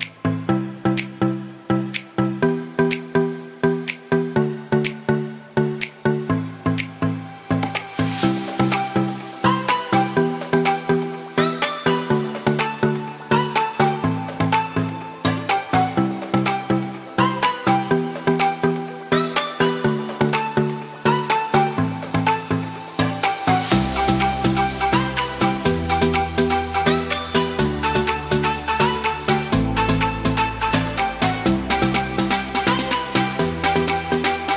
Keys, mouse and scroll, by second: 0.1 s, 0.4 g, 0.5 x, 1.2 s, 2.6 g, 2.7 z, 3.8 x, 4.3 s, 4.9 g, 7.8 x, 8.8 ctrl+z, 10.0 m, 11.6 g, 11.8 z, 12.9 g, 15.3 y, 16.4 g, 16.4 y, 18.9 shift+d, 24.2 ctrl+z, 24.4 ctrl+z, 24.5 ctrl+z, 24.7 ctrl+z, 25.7 y, 26.3 g, 26.3 x, 33.5 g, 33.6 z.